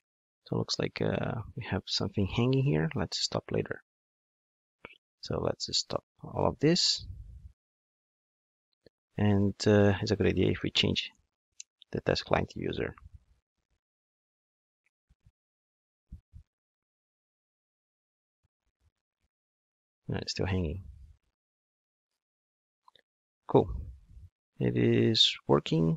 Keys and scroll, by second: 4.8 super+F2, 11.6 Return, 12.5 ctrl+shift+d.